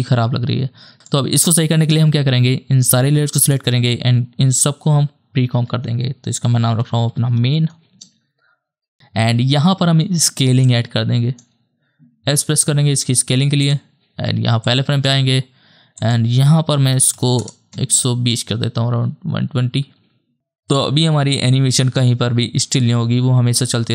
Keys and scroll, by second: 5.4 ctrl+shift+c, 6.5-7.9 typing, 12.5 s, 17.0 KP_1, 17.1 KP_2, 17.4 KP_0, 17.7 Return, 19.6 KP_0.